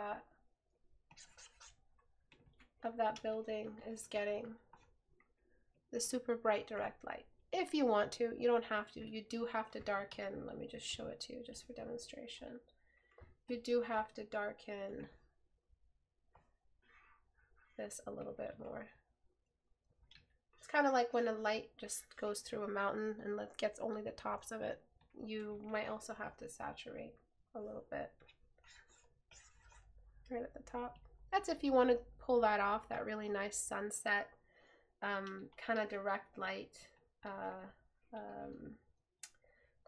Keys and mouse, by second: 10.2 right click, 12.4 right click, 38.3 right click.